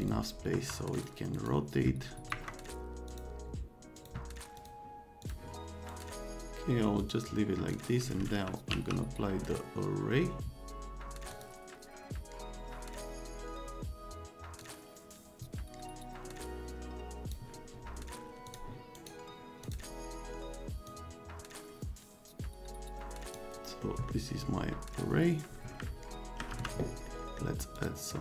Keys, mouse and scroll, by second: 0.0 click, 0.5 F3, 0.9 click, 1.3 right click, 2.3 Escape, 3.1 click, 4.0 click, 4.6 click, 5.2 click, 5.9 scroll down 2, 7.0 click, 7.7 click, 8.2-9.2 typing, 11.3 click, 14.6-17.3 drag, 18.5 click, 18.9 right click, 19.6 click, 20.9-23.4 drag, 24.0 middle click, 26.0 middle click, 26.2 right click, 26.5 F3, 27.1 right click, 27.8 middle click, 28.1 middle click.